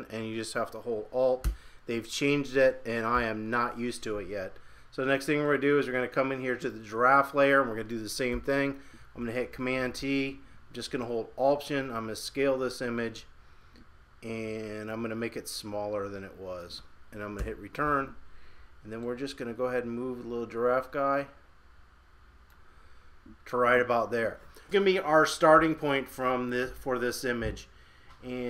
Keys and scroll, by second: 3.1 super+=, 8.3 super+t.